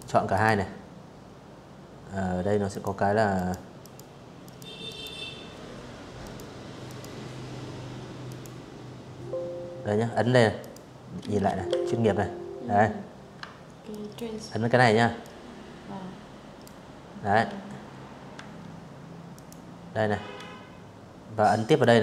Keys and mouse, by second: 0.4 click, 1.4 click, 2.5 click, 3.9 click, 4.5 click, 6.0 click, 8.2 click, 9.4 ctrl+1, 11.6 ctrl+click, 12.9-14.3 ctrl+drag, 16.0 Escape, 17.0 click, 19.3 click.